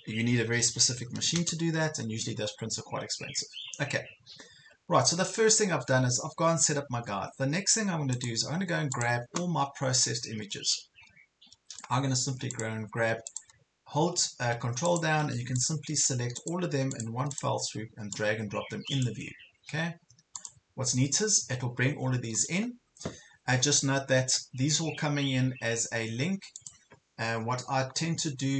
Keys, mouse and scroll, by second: 1.0 KP_1, 1.2 KP_0, 2.9-4.8 scroll down 1, 4.9 ctrl+scroll down 1, 5.5 ctrl+scroll up 1, 6.6 ctrl+scroll down 1, 9.1-12.0 drag, 13.3 ctrl+click, 14.9 ctrl+click, 15.6 ctrl+click, 16.4 ctrl+click, 16.9 ctrl+click, 17.3 ctrl+click, 18.1-19.9 drag, 21.2 ctrl+scroll up 1, 22.1 ctrl+scroll down 1, 26.6 click.